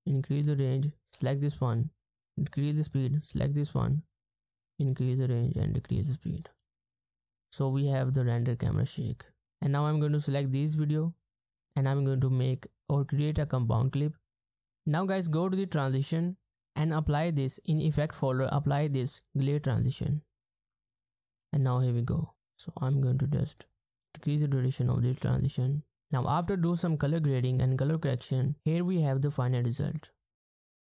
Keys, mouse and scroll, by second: 6.6 space, 7.3 space, 8.5 space, 9.4 space, 11.3 right click, 21.4 space, 22.1 space, 22.3 space, 24.1 space, 25.2 space.